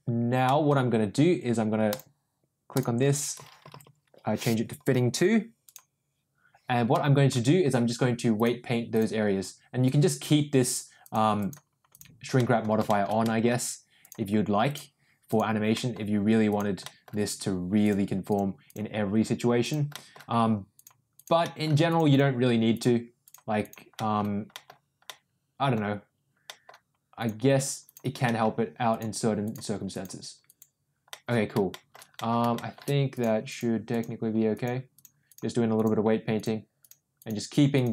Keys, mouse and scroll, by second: 0.4 middle click, 1.8 click, 2.7-5.7 drag, 3.8 t, 6.9 middle click, 8.4 click, 9.8 click, 10.6 click, 11.0 click, 11.3 click, 11.8 click, 12.3 middle click, 12.8 shift+middle click, 13.1 middle click, 13.9 click, 14.6 click, 15.2 click, 15.7 middle click, 16.4 click, 16.8 middle click, 17.8 click, 18.2 click, 18.6 click, 19.5 click, 19.9 middle click, 20.7 click, 21.1 click, 21.4 middle click, 21.8 click, 22.0 click, 22.7 click, 23.2 click, 23.5 click, 23.9 middle click, 24.5 middle click, 25.0 middle click, 26.4 middle click, 27.1 click, 27.8 click, 28.2 middle click, 28.8 click, 29.4 click, 29.8 click, 30.4 click, 31.0 middle click, 31.7 shift+middle click, 32.1 middle click, 32.5 shift+middle click, 33.1 click, 33.4 click, 33.8 click, 34.5 click, 34.9 click, 35.2 click, 35.7 click, 36.3 click, 36.7 click, 37.1 click, 37.7 click.